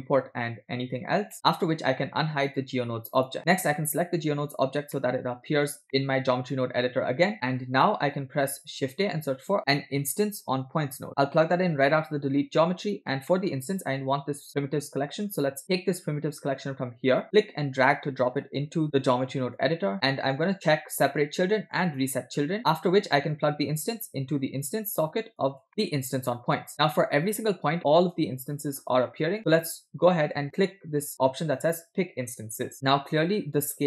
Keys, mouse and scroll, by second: 1.3 shift+middle click, 2.4 click, 3.2 click, 3.8 click, 5.0 shift+middle click, 5.6 scroll down 2, 5.9 middle click, 6.6 click, 7.3 middle click, 7.6 scroll up 1, 8.2-8.5 drag, 8.9 shift+a, 12.3 click, 13.3 middle click, 17.3 drag, 19.6 click, 19.9 scroll up 2, 20.1 middle click, 20.9 click, 21.8 click, 22.6 middle click, 23.7-26.0 drag, 26.0-27.6 middle drag, 28.1-30.1 middle drag, 32.6 click, 33.4-33.8 middle drag.